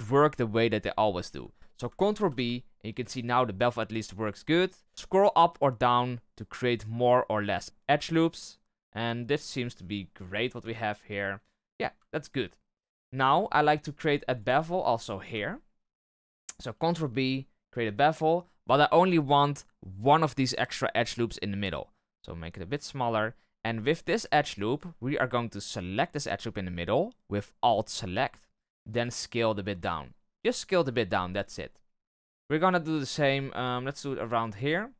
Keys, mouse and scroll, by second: 2.1 ctrl+b, 10.5 Tab, 10.9 middle click, 11.7-12.0 scroll down 2, 12.0 shift+middle click, 12.7 scroll up 2, 12.9 Tab, 13.4 shift+middle click, 13.6 scroll down 1, 13.7-14.3 scroll up 1, 14.3 alt+right click, 14.6 shift+middle click, 14.8-15.4 scroll up 5, 15.4 shift+middle click, 15.8-16.7 scroll up 1, 16.7 ctrl+b, 25.9 alt+right click, 28.0-28.4 scroll down 3, 28.9 s, 31.0-31.3 scroll down 2, 31.3-32.9 shift+middle drag, 32.9-34.4 scroll up 2, 34.4 alt+right click, 34.7-34.9 scroll up 1.